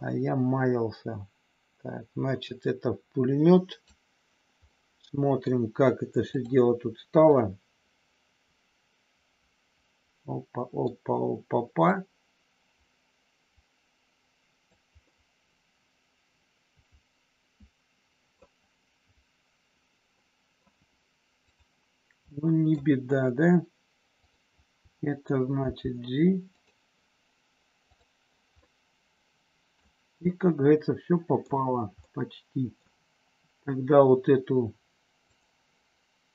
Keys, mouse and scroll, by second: 0.0-3.8 drag, 4.7 middle click, 6.2 click, 7.2 scroll up 1, 7.3-10.8 middle drag, 11.8-14.6 drag, 15.1-18.3 middle drag, 20.1 scroll up 1, 20.2 middle click, 21.3 click, 22.2 middle click, 24.1 click, 25.6 g, 26.5 click, 28.6-29.7 middle drag, 30.2 scroll up 1, 30.3-31.3 middle drag, 32.0 scroll up 1, 32.1 middle click, 35.2 click.